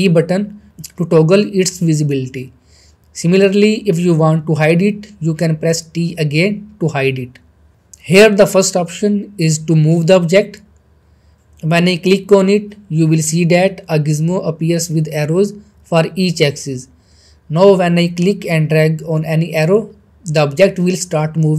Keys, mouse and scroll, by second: 0.8 t, 4.0 t, 10.1 click, 11.4-12.3 middle drag, 15.8 scroll up 1, 16.1 middle click, 17.5-21.0 drag.